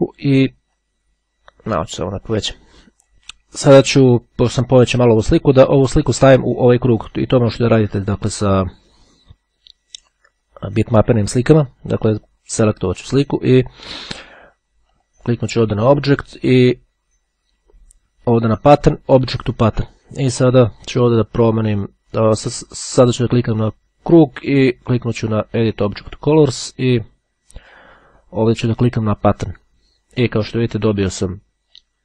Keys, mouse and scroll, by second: 0.8-2.9 ctrl+drag, 3.2-4.3 drag, 6.4-7.4 drag, 12.3-13.6 drag, 14.6 click, 19.3 click, 20.5 click, 25.0-26.8 drag, 28.4-30.2 drag.